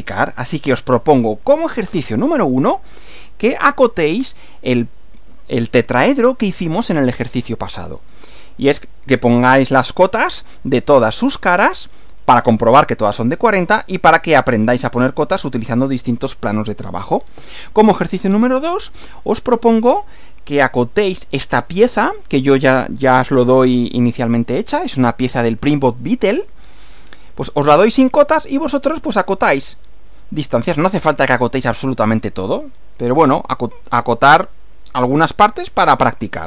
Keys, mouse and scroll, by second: 0.3 click, 17.4 Right.